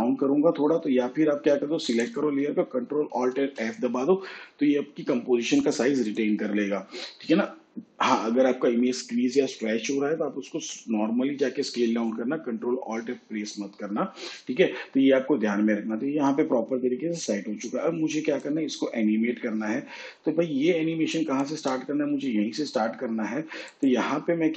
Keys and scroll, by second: 3.1 ctrl+alt+f.